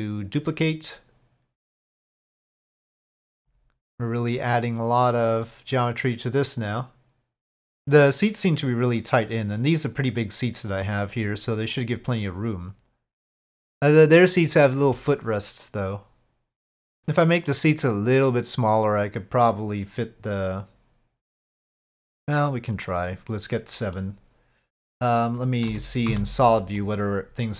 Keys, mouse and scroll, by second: 3.5 shift+d, 4.8-7.2 drag, 9.0-11.1 drag, 11.8 click, 12.5-16.1 drag, 16.1-17.5 middle drag, 19.4-21.4 middle drag, 23.0 click, 24.0-24.9 middle drag, 25.7 z, 26.4-26.8 middle drag.